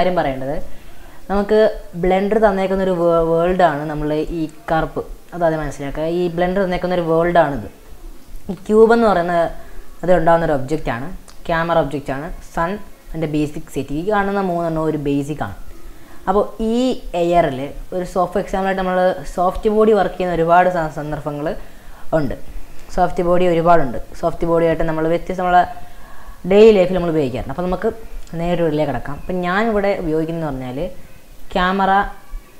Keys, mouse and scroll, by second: 0.6-2.5 middle drag, 2.5-3.1 scroll down 9, 3.1-5.7 middle drag, 5.7 scroll up 4, 6.0-6.5 middle drag, 6.5 scroll up 2, 6.8-9.0 middle drag, 9.0 scroll down 1, 9.2-9.9 scroll up 3, 13.0-15.7 drag, 15.8-18.6 middle drag, 18.6 click, 19.3 click, 20.2-20.8 middle drag, 20.8-21.1 scroll up 3, 21.1-22.2 middle drag, 22.2 click, 30.3 scroll down 2, 31.3-32.3 drag.